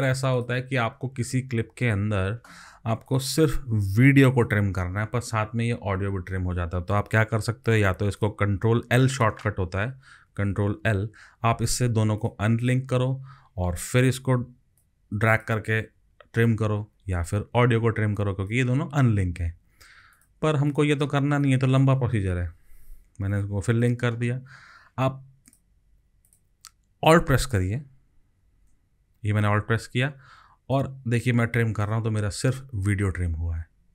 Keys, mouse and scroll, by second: 6.9 ctrl+z, 10.7 ctrl+l, 12.6 double click, 17.0 ctrl+z, 19.4 ctrl+z, 22.8 ctrl+l, 30.7 alt+click.